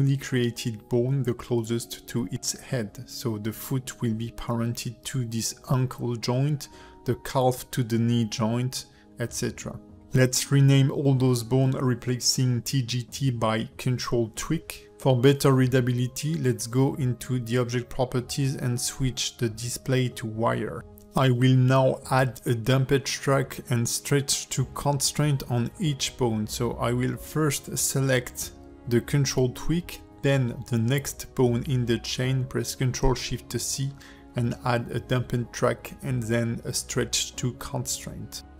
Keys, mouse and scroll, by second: 0.5 Tab, 3.9 ctrl+p, 5.9 click, 6.4 shift+click, 7.3 ctrl+p, 8.5 shift+middle click, 9.0 click, 9.6 shift+click, 9.9 ctrl+F2, 9.9 shift+middle click, 10.6 KP_0, 14.9 click, 15.1 click, 16.6 click, 17.4 click, 19.3 scroll up 1, 19.7 shift+middle click, 20.7 shift+middle click, 21.5 click, 22.3 shift+click, 23.4 click, 23.9 shift+middle click, 24.6 click, 24.9 click, 25.8 click, 26.2 Tab, 26.6 shift+click, 27.5 ctrl+p, 28.6 Tab, 29.1 click, 29.7 shift+click, 30.3 ctrl+shift+c, 31.8 ctrl+shift+c, 33.1 click, 33.6 g, 35.4 click, 36.0 shift+click, 36.5 ctrl+shift+c, 37.8 ctrl+shift+c.